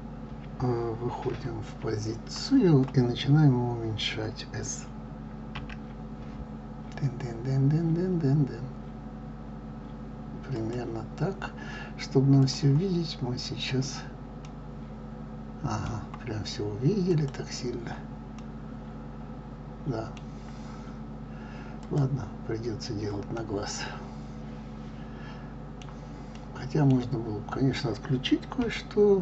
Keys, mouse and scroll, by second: 1.0 KP_3, 5.6 s, 12.3 click, 13.1-14.2 scroll up 2, 14.2-17.1 middle drag, 17.1 click, 18.5-21.9 middle drag, 21.9-23.3 drag, 23.3-28.4 middle drag, 28.4 KP_3.